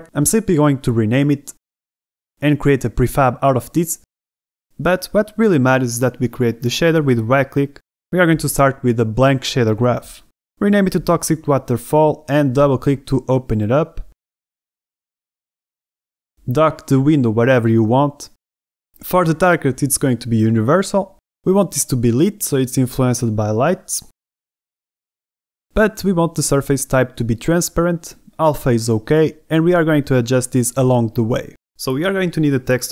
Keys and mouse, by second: 3.5 click, 4.7 click.